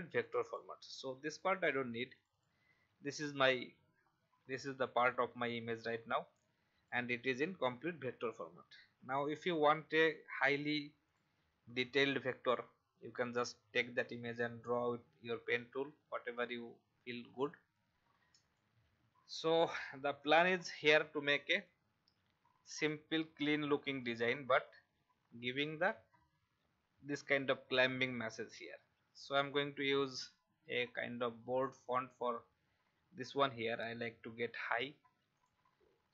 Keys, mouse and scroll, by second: 1.5 Delete, 2.1 click, 4.0 alt+scroll down 1, 6.4 click, 7.5 alt+scroll up 1, 9.0 alt+scroll down 1, 11.0 click, 15.9-16.6 alt+scroll down 2, 17.2-18.0 scroll up 2, 18.5-22.2 drag, 25.2-27.7 scroll down 1, 27.7-29.2 scroll up 1, 29.4 click.